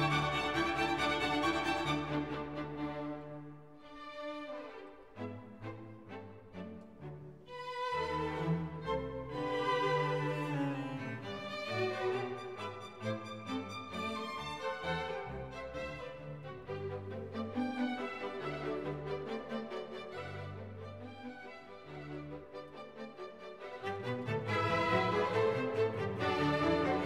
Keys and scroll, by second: 7.8 e.